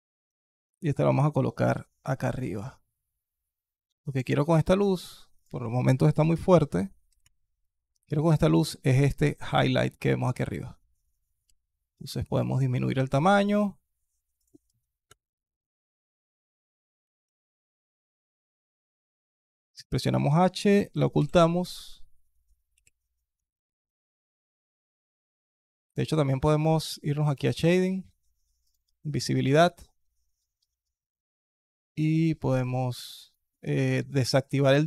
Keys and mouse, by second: 0.2 alt+drag, 1.0 r, 2.3 g, 11.3 s, 19.4-19.8 alt+drag, 21.0 h, 22.6 ctrl+z, 23.3-24.2 alt+drag, 27.1 click, 28.5 click, 31.9 click, 33.0 click, 33.9 click.